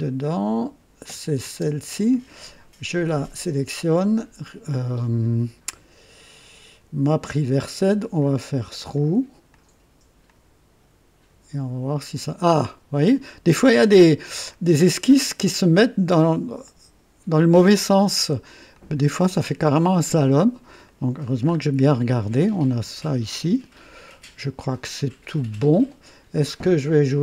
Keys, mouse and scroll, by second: 1.0 click, 1.4 space, 7.7 click, 8.9 click, 9.5 click, 10.2 click, 12.9-13.3 scroll down 2, 13.8 scroll down 2, 14.4-16.2 drag, 16.6-18.2 right drag, 18.7-19.2 drag, 20.8 right click, 21.4-21.9 scroll up 1, 22.6-25.6 drag, 26.9 click.